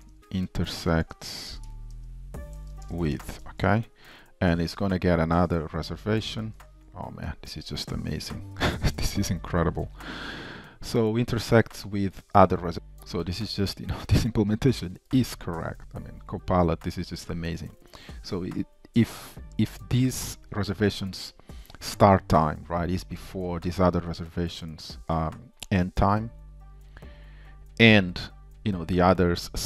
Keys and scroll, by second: 6.6 Tab.